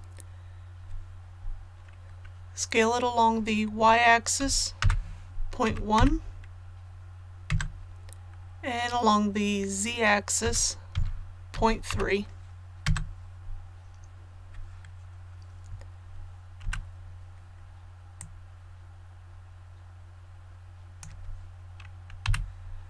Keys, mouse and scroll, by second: 4.4-5.9 typing, 10.4-11.9 typing, 18.1-21.3 drag, 22.2 KP_1.